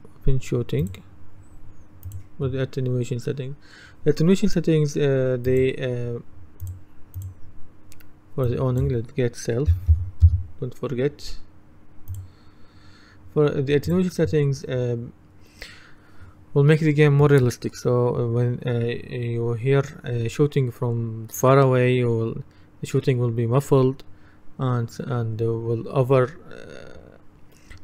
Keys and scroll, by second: 9.5-10.5 typing.